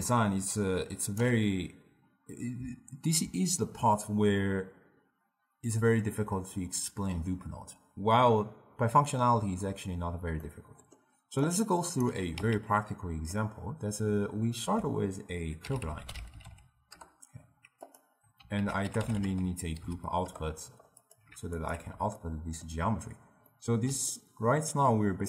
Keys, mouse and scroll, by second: 10.5-11.5 middle drag, 11.5 click, 12.4 x, 12.8-14.7 middle drag, 14.7 ctrl+a, 18.7 ctrl+a, 21.7 alt+shift+click, 22.3-25.2 ctrl+middle drag.